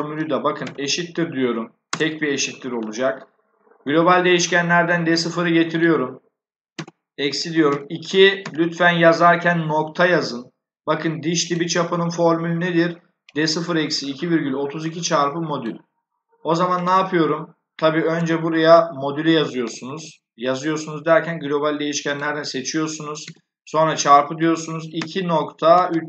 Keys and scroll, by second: 0.5 shift+0, 1.8 BackSpace, 6.6 -, 7.6 2, 8.3 ., 18.0 BackSpace, 23.1 *, 24.3-26.0 typing.